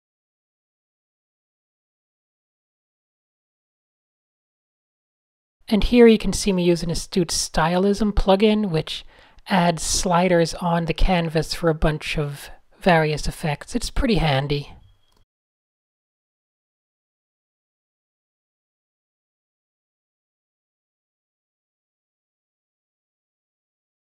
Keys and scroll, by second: 0.0 super+z, 1.1 shift+Up, 1.1 shift+Up, 1.3 shift+Up, 2.7 shift+super+a, 2.9 super+0, 3.0 Tab, 3.8 a, 4.0 Tab, 7.9 alt+shift+super+r, 8.8 shift+z, 11.6 alt+shift+super+g, 12.0 alt+shift+super+r, 12.7 alt+super+g, 14.3-16.2 typing, 18.8 shift+Down, 19.2 Return, 19.6-20.1 typing, 21.4-24.0 typing.